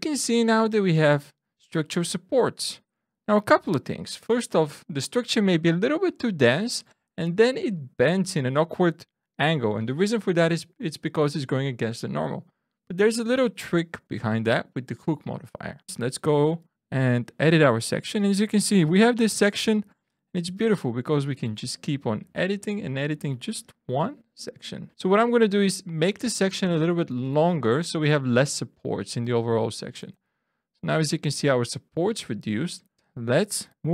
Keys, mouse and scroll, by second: 16.2 click, 16.9 Tab, 20.9 shift+middle click, 21.4 scroll down 1, 21.7-22.4 scroll up 6, 22.6 shift+middle click, 24.9 click, 24.9 1, 26.1 click, 28.5 scroll down 3, 29.0 middle click, 29.9 scroll down 1, 30.2 Tab, 31.8 middle click, 32.8 Tab, 33.8 click, 33.8 3.